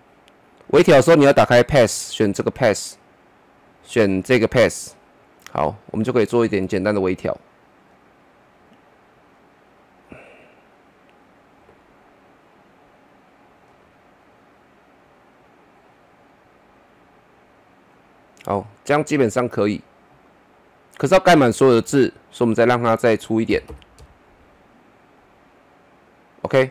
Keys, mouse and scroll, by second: 23.5 KP_6, 23.6 KP_2, 24.0 Return, 24.6 click, 25.5 scroll down 1.